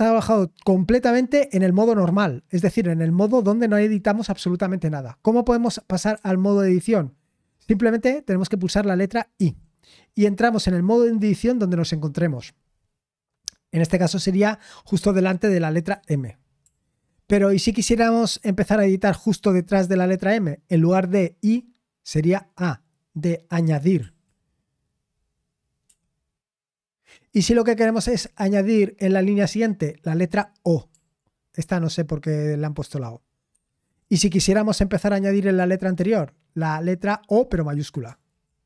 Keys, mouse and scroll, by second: 16.6 l, 37.8-38.6 typing.